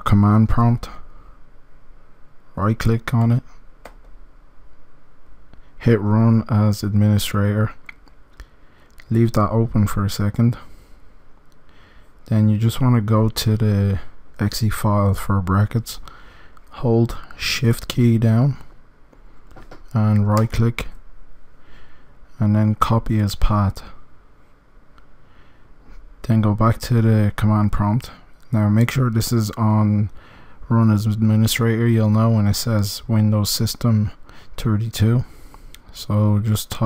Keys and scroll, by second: 0.2 m, 0.5 d.